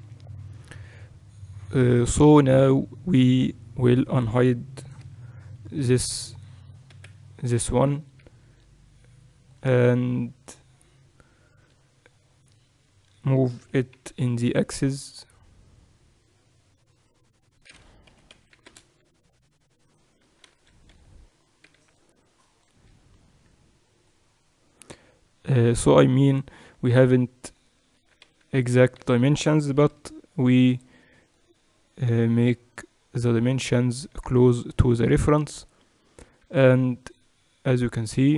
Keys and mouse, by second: 3.4-5.0 middle drag, 5.0 alt+h, 6.1-8.4 right drag, 6.9 KP_1, 11.3-16.8 middle drag, 13.6 g, 19.8-23.2 right drag, 20.2 Tab, 20.4 z, 20.9 a, 21.6 b, 24.1-26.6 drag, 26.6 Tab, 27.4-29.8 right drag, 27.9 Tab, 28.3 z, 28.7 z, 29.0 a, 29.8 b, 31.4-33.3 drag, 36.2 Tab.